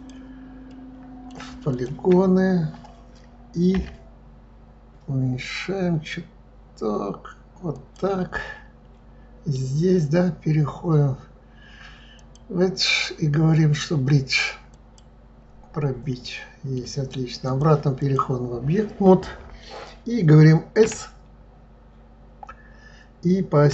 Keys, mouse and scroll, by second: 0.6-1.7 middle drag, 1.7 shift+click, 8.3-11.4 middle drag, 12.1-15.1 drag, 16.2-17.4 middle drag, 17.4-20.4 drag, 20.9 s.